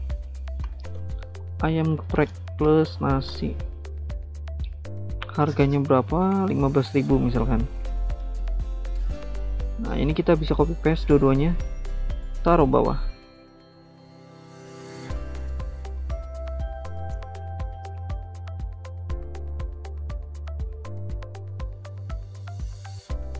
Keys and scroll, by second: 0.0-3.8 typing, 6.1 Right, 6.4 BackSpace, 10.9 typing, 11.1 ctrl+c, 13.3 ctrl+v.